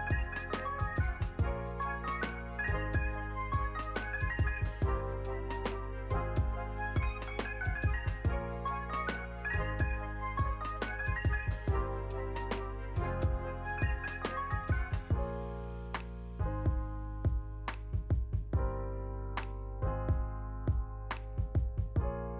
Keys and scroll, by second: 0.6 BackSpace, 1.7 6, 4.1 BackSpace, 5.2 6, 11.0 ctrl+v, 12.5 ctrl+v, 13.2 ctrl+v, 14.0 space, 16.8 space, 17.9 ctrl+a, 18.2 ctrl+s, 20.9 u.